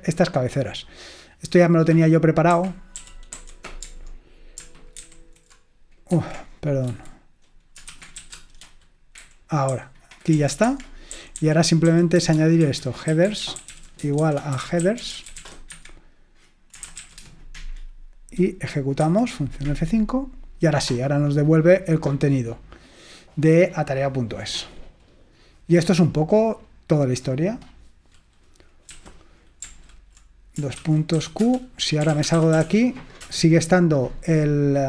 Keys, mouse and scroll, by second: 2.4-3.9 typing, 5.1 ctrl+alt+v, 5.1 ctrl+alt+g, 6.1 Escape, 6.9-17.8 typing, 19.1 F5, 23.6-24.4 scroll up 4, 25.2-26.4 scroll up 3, 27.8-28.1 scroll down 2, 29.0 typing, 30.8-33.3 typing.